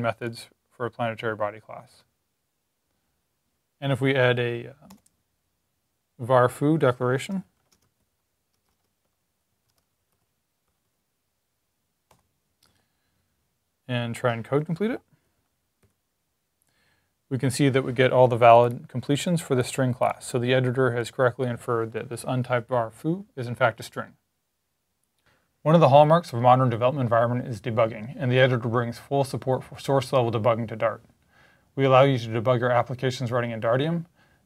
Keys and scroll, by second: 6.9-10.7 typing, 14.1-15.7 typing.